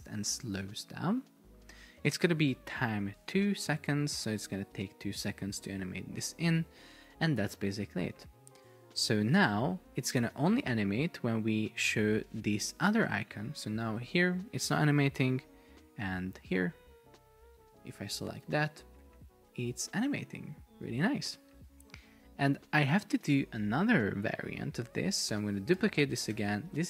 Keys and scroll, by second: 13.9 super+p, 15.2 Escape, 18.5 super+p, 21.0 Escape, 25.9 super+d, 26.5 super+r, 26.7 Right.